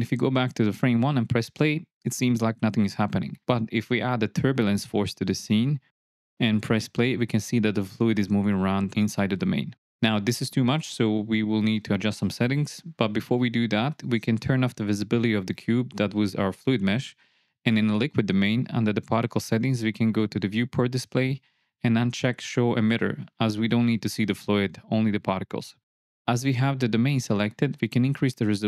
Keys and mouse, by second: 1.0 shift+Left, 1.8 space, 3.4 space, 3.6-3.9 drag, 4.6 shift+Left, 5.5 shift+a, 7.7 space, 12.4 space, 13.1 shift+Left, 14.3 click, 15.7 click, 16.0-16.8 drag, 18.3 click, 21.3 click, 25.7 click, 27.6 click.